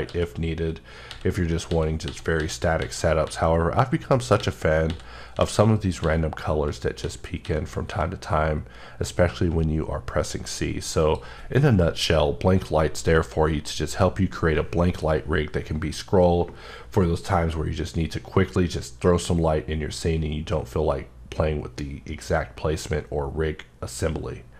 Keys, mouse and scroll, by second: 0.0 w, 1.1-3.2 typing, 4.0 scroll down 1, 4.0 scroll up 1, 4.3-10.2 typing, 5.6 scroll up 1, 11.0 click.